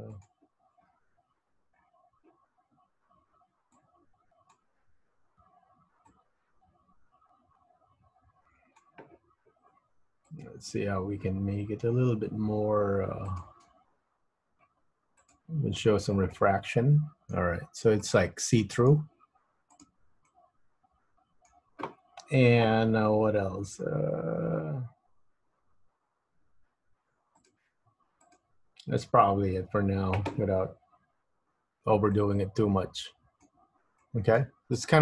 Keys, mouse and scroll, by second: 0.3 click, 0.9-1.5 scroll down 5, 1.5 scroll up 5, 1.8-5.3 scroll down 4, 6.3 click, 10.4 click, 13.5 click, 15.5 click, 16.5 middle click, 17.8-18.4 scroll up 2, 18.4 middle click, 19.9 click, 20.4 middle click, 27.6 click, 28.5 click, 31.3-31.7 scroll up 2, 31.7 scroll down 4, 32.3 middle click, 34.1 middle click, 34.9 click.